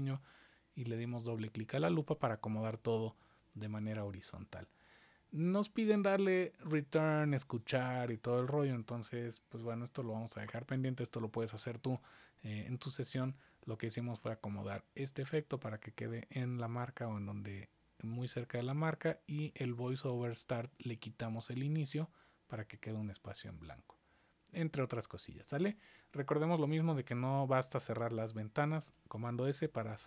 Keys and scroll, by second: 4.5 super+s, 27.8 super+s, 29.0 super+s.